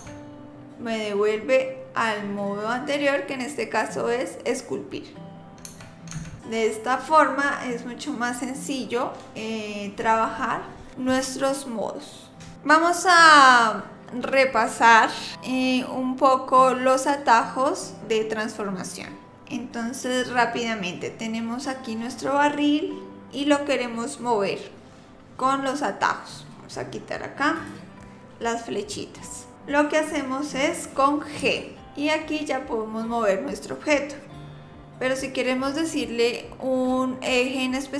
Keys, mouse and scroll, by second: 0.0 Tab, 5.7-6.4 Tab, 6.4 click, 27.6 click, 31.4 g.